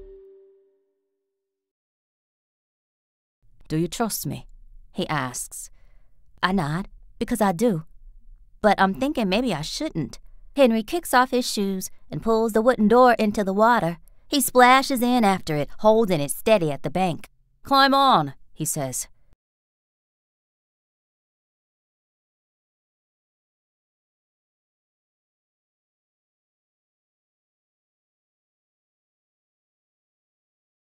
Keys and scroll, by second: 2.7 r, 3.3 space, 8.3 r, 12.8 r, 15.6 t, 16.5-17.8 shift+scroll, 17.8 shift+t, 18.6 r, 19.2 space, 19.7 t, 25.0 a, 26.9 b, 29.1 a.